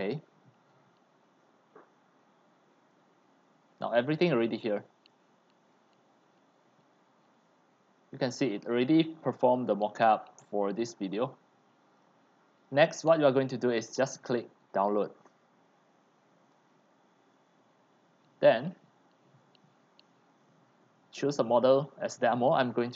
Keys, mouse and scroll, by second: 0.0-1.3 drag, 1.3 middle click, 1.3 scroll down 3, 1.6-2.9 scroll, 2.9-4.1 middle drag, 4.1 click, 6.4-8.6 drag, 8.6-9.8 middle drag, 8.6-9.2 scroll, 9.8-10.3 scroll down 2, 12.0 middle click, 12.0-16.4 drag, 20.3 click, 21.4 click.